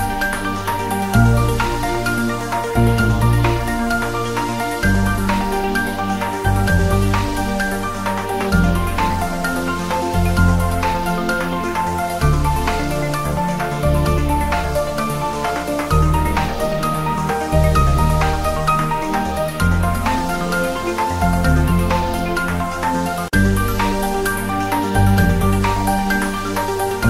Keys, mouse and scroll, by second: 1.0 scroll down 1, 3.0 scroll up 1, 3.2-3.7 drag, 4.9 click, 6.4-7.1 drag, 8.9-9.5 drag, 12.2-12.6 drag, 15.0-15.4 drag, 16.6-17.1 click, 17.4-18.0 scroll down 1, 18.0-18.5 drag, 20.2-20.9 scroll down 1, 23.4 g, 24.0 click, 24.1 scroll up 1, 24.6-25.0 click, 25.7-26.3 scroll up 1, 26.6 click.